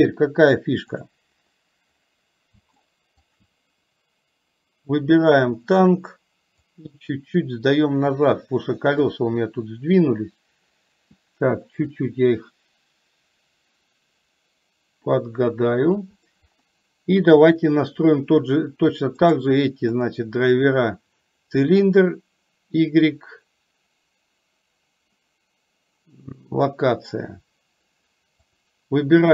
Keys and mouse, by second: 2.9 shift+middle click, 5.4 click, 6.9-9.2 drag, 12.1 click, 13.4-16.1 drag, 17.4 click, 28.6 click.